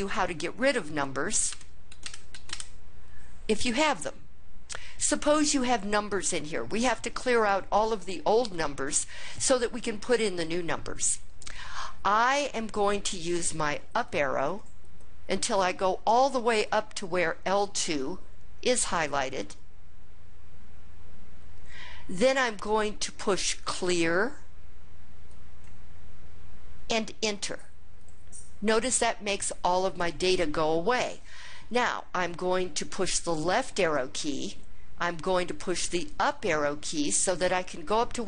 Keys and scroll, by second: 1.3 Return, 1.7 2, 1.8 Return, 2.1 2, 2.3 Return, 13.8 Up, 14.2 Up, 14.6 Up, 15.3 Up, 27.8 Return, 33.6 Left, 36.1 Up.